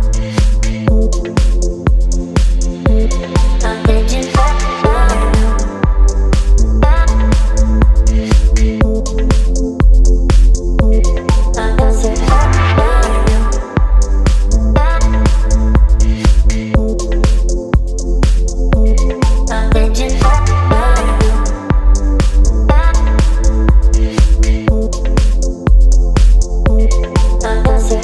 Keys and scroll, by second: 1.1 space, 3.9 space, 5.8 ctrl+d, 6.8 x, 7.7 ], 7.8 ], 9.8 space, 15.1 space, 16.4-18.5 typing, 19.6 space, 21.3-22.6 typing, 25.5 space, 26.3 ], 26.6 ].